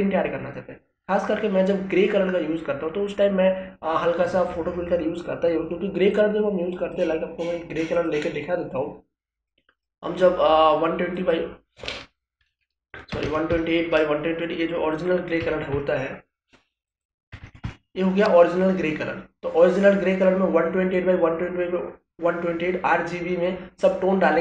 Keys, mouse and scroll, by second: 6.1 click, 14.9 click.